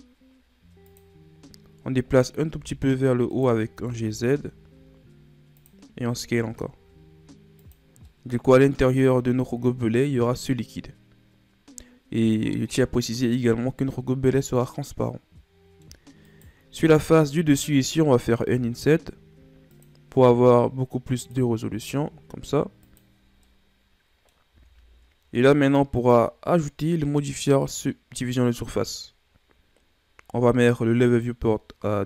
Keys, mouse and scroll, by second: 2.5 s, 3.6 g, 5.9 s, 8.0-9.9 middle drag, 9.9-12.6 scroll up 2, 12.6-15.8 middle drag, 16.2-18.5 right drag, 18.5 i, 20.2 i, 23.4-24.5 middle drag, 24.5 Tab, 25.9-29.0 drag, 31.0-32.0 drag.